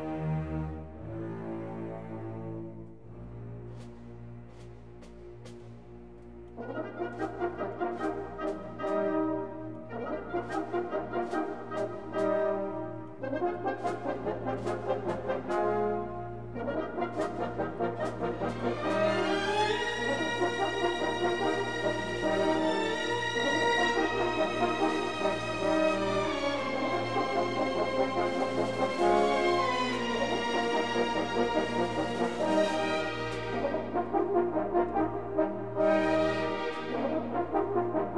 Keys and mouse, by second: 0.3-2.6 drag, 4.3 click, 5.0 shift+click, 5.4 shift+click, 6.3 s, 6.5 y, 6.7 KP_0, 6.8 KP_Enter, 8.8 shift+click, 9.2 shift+click, 10.0 s, 10.3 y, 10.4 KP_0, 10.9 KP_Enter, 14.0 alt+shift+click, 15.9 alt+shift+click, 17.3 alt+shift+click, 18.9 KP_7, 19.7 alt+z, 21.5 e, 22.5 x, 23.1 click, 24.3-27.3 drag, 29.8 alt+z, 31.4 3, 32.2-33.3 drag, 34.2 h, 35.5 1.